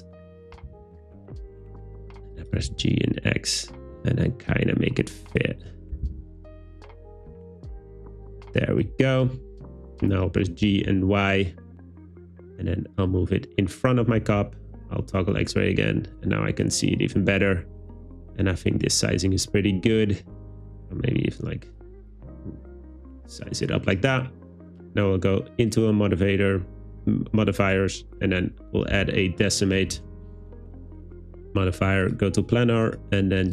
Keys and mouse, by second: 0.6 g, 0.7 z, 2.4 click, 2.6 g, 2.7 x, 5.3 click, 5.8 Tab, 6.0 a, 6.1 s, 7.7 click, 9.3 Tab, 10.5 g, 10.8 y, 13.1 click, 14.2 z, 15.4 `, 19.9 Tab, 20.5 a, 20.7 s, 21.0 z, 21.7 click, 21.9 Tab, 27.7-31.2 drag, 32.9-33.5 drag.